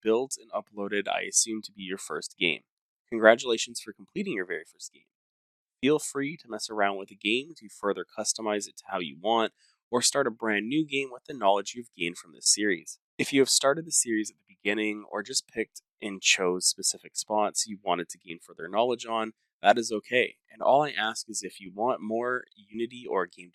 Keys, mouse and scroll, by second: 1.5 click, 3.0 scroll, 5.4 click, 6.5 click, 6.9 1, 7.4 click, 7.8 5, 8.6 click, 9.4 2, 10.3 click, 10.9 click, 11.1-15.0 typing, 16.6-23.4 typing.